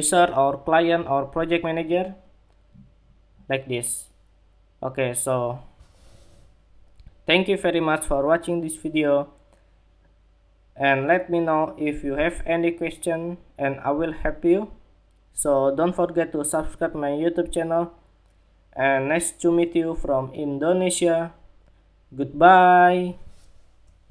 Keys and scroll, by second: 24.0 shift+super+2.